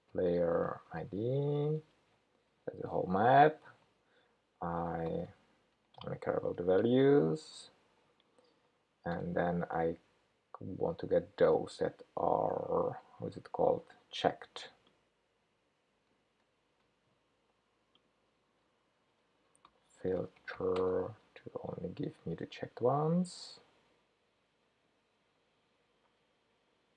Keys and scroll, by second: 16.7 super+c, 21.4 super+v.